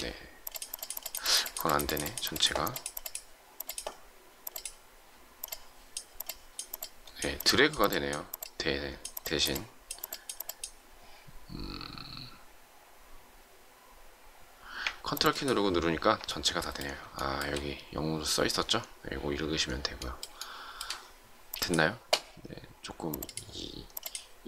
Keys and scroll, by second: 21.3 shift+space.